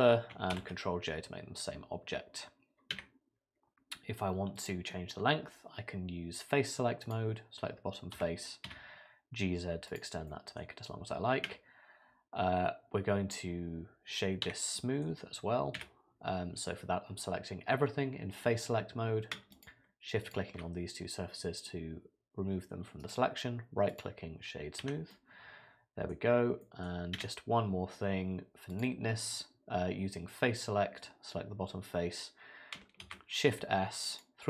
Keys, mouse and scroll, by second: 0.5 ctrl+j, 2.9 Tab, 4.6 click, 7.0 click, 8.2 g, 10.3 middle click, 11.5 Tab, 14.5 Tab, 14.8 middle click, 15.8 a, 19.5 shift+click, 20.2 shift+click, 23.0 right click, 24.8 Tab, 25.1 middle click, 26.6 middle click, 27.2 Tab, 28.7 click, 33.0 shift+s.